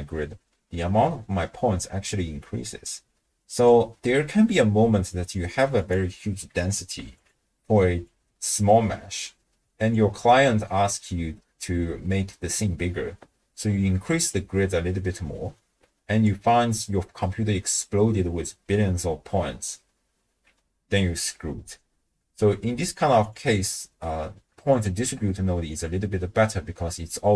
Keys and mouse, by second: 5.8-7.3 drag, 8.1-9.9 drag, 14.3-16.2 drag, 22.4-23.0 middle drag, 23.2 click, 24.7 alt+shift+click, 25.7 click.